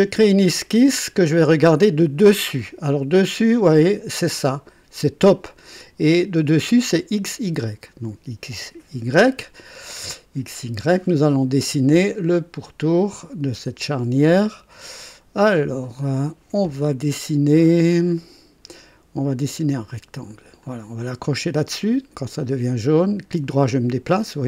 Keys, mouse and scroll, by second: 0.9 click, 4.3 click, 6.4 click, 9.6-9.9 scroll down 2, 10.1 right click, 13.0 click, 15.4 click, 15.7 right click, 17.5-18.0 scroll down 2, 18.2 right click, 20.6 click, 22.3-24.2 right drag.